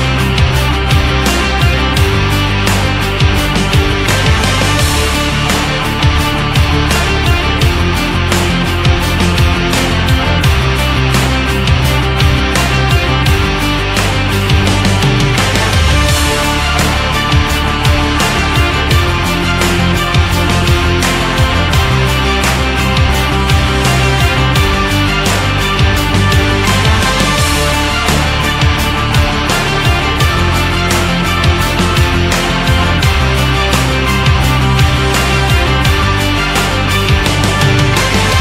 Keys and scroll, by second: 2.4 Up, 4.5 Left, 5.8 Up, 7.5 Right, 11.7 Up, 19.8 Left, 21.0 Down, 22.9 Left, 24.9 Down.